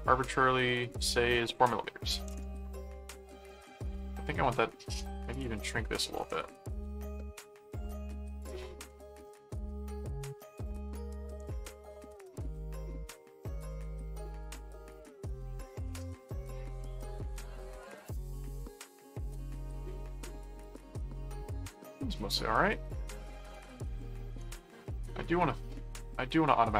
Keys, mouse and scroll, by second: 0.9 click, 3.8 click, 5.3 click, 8.4 click, 10.6 click, 17.8 click, 19.2 middle click, 20.4 middle click, 21.6 click, 22.4 ctrl+click, 22.9 ctrl+1, 24.4 ctrl+4.